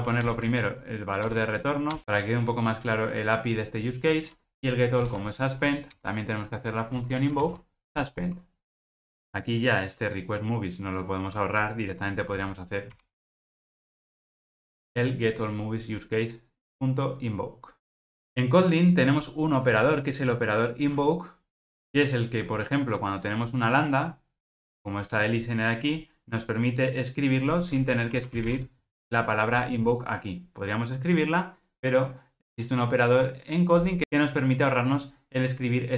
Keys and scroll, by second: 0.2 alt+Return, 5.0 alt+Return, 6.9 alt+super+l, 7.4 ctrl+alt+o, 13.0 alt+super+n, 29.0 Return.